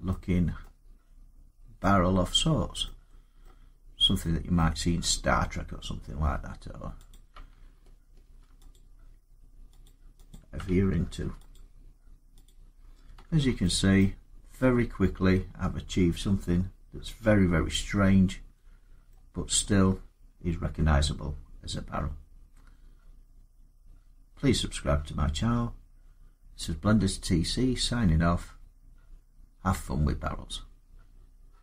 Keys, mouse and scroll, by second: 0.4-2.0 middle click, 1.5 scroll, 3.2 middle click, 4.4 middle click, 6.1 Tab, 6.9 click, 8.0 ctrl+r, 8.6 click, 9.6 click, 10.1 click, 10.9 ctrl+r, 11.3 click, 12.2 click, 13.0 Tab, 13.8 middle click, 18.9 middle click, 25.1-29.5 middle drag.